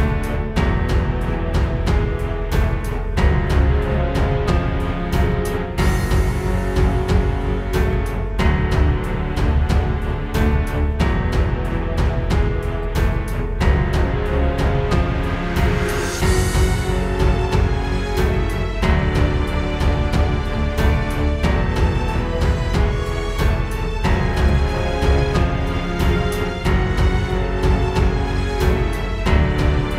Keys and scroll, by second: 0.2 super+g, 0.4 super+[, 1.1 super+[, 5.7 space, 6.2 super+space, 9.0 space, 9.4 space, 11.7 super+z, 21.3 super+z, 23.4 space, 24.0 super+space, 24.5 space, 27.7 alt+super+space, 28.3 space, 28.9 alt+super+space, 29.3 alt+super+space.